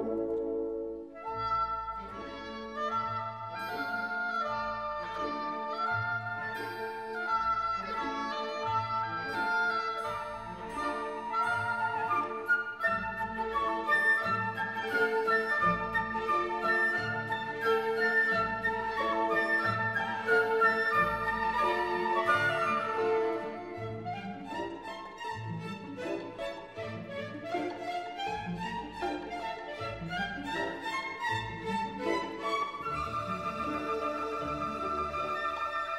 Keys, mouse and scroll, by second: 0.1 scroll down 1, 0.2 space, 0.3 alt+click, 0.6 right click, 0.8 click, 0.9 ctrl+middle click, 1.2 click, 1.2 right click, 1.3 scroll down 1, 1.4 alt+click, 1.7-2.2 scroll up 2, 1.8 middle click, 1.8 alt+click, 1.9-8.4 typing, 2.0 alt+middle click, 2.2 click, 2.4 right click, 2.4 click, 2.5 right click, 2.6 alt+click, 2.8 scroll up 1, 3.1 scroll down 1, 3.2 click, 4.2 click, 4.4 scroll up 1, 4.9 middle click, 5.1 click, 5.6 scroll up 1, 5.6 click, 5.8 click, 6.1 click, 6.4 scroll down 1, 6.6 scroll up 1, 7.3 right click, 7.5 click, 7.7 click, 8.3 click, 8.5 scroll down 1, 8.6 alt+click, 8.8 shift+right click, 8.9 click, 9.0 right click, 9.1 click, 9.3-9.7 scroll down 3, 9.4 click, 9.5-11.1 typing, 9.7 click, 9.8 right click, 9.8 click, 9.9 right click, 10.0 click, 10.2 scroll up 1, 10.3 click, 11.0 click, 11.4 click, 11.6 click, 11.8 shift+right click, 12.1 scroll down 1, 12.2 alt+click, 12.3-16.3 typing, 12.3 alt+click, 13.1 click, 13.2 scroll up 1, 13.2 click, 13.6 click, 14.0 click, 14.2 click, 14.4 click, 14.7 click, 14.8 click, 15.3 scroll up 1, 15.4 click, 15.8 click, 16.0 click, 16.2 right click, 16.2 click, 16.4 right click, 16.5 click, 17.2 right click, 17.5 g, 17.6 click, 17.8 f, 18.0 click, 18.2 right click, 18.4 click, 18.5 r, 18.6 click, 19.0 right click, 19.0 scroll down 1, 19.1 click, 19.3 scroll up 1, 19.4 scroll down 1, 19.6 click, 19.6 space, 19.7 click, 19.8 g, 19.9 click, 20.3 shift+click, 20.4 shift+right click, 20.5 click, 20.8 g, 20.8 click, 21.2 right click, 21.4 scroll up 1, 21.8 right click, 21.8 click, 22.0 right click, 22.1 click, 22.3 scroll down 1, 22.4 scroll up 1, 22.5 click, 22.9-32.8 typing, 23.0 click, 23.2 alt+click, 23.6 click, 23.7 click, 24.0 click, 24.1 click, 24.4 alt+click, 24.9 click, 25.1 click, 25.6 alt+middle click, 25.7 click, 26.0 click, 26.6 right click, 26.6 click, 26.9 alt+click, 27.0 right click, 27.1 click, 27.3 shift+click, 27.5 Delete, 27.8 click, 27.9 right click, 28.0 click, 28.4 click, 28.8 click, 29.3 click, 29.8 ctrl+s, 29.8 scroll up 1, 30.0 click, 30.3 click, 30.5 click, 30.6 click, 30.6-31.7 scroll up 3, 30.8 click, 31.2 alt+click, 31.7 click, 31.9 right click, 32.4 click, 32.7 click, 32.8 click, 33.3 right click, 33.8 scroll up 1, 33.9 click, 34.0 scroll down 1, 34.0 middle click, 34.2 click, 34.4 middle click, 34.4 click, 34.6 alt+scroll up 1, 34.7 click, 34.8 right click, 34.9 click, 35.2 space, 35.4 alt+scroll down 1, 35.4 alt+click, 35.7 right click, 35.7 Delete, 35.9 Delete.